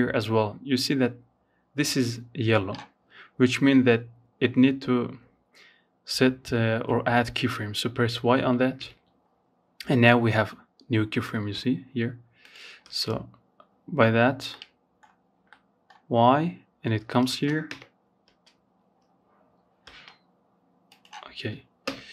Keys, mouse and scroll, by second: 9.4-11.0 drag, 11.0 space, 12.7 middle click, 13.2-13.5 scroll up 4, 13.7-15.5 middle drag, 15.5 space, 15.8 KP_0, 16.4 space, 18.0 space, 19.0 click, 20.0 KP_0, 20.4 KP_7, 21.9 shift+middle click.